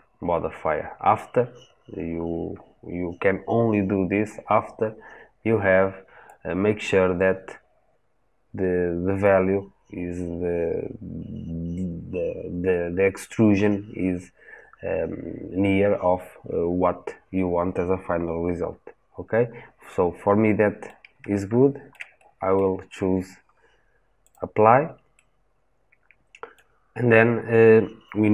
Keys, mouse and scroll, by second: 6.1-9.1 drag, 19.7-24.2 middle drag, 24.2 click, 25.0-28.3 middle drag.